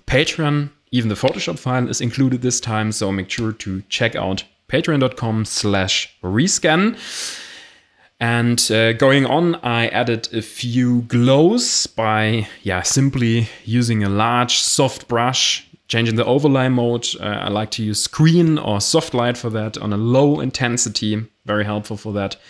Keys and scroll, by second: 15.6 Return, 15.8 Delete.